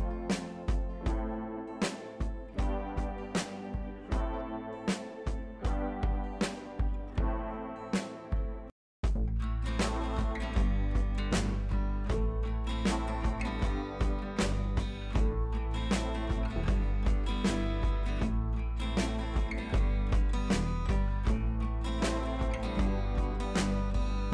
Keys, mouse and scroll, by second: 5.6-6.6 drag, 7.6 ctrl+a, 8.3 click, 9.0 ctrl+d, 9.4 t, 9.9 click, 10.5 scroll up 1, 10.7-11.1 scroll down 1, 11.1 click, 12.5 ctrl+c, 12.7 click, 13.3 ctrl+v, 14.4 ctrl+a, 16.6-18.1 drag, 21.8-22.3 alt+drag.